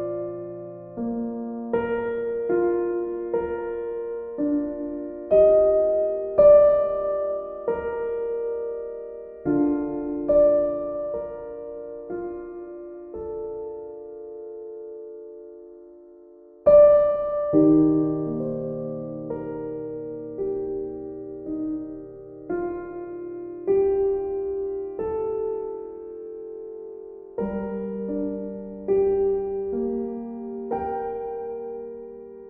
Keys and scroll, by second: 11.4 ctrl+z.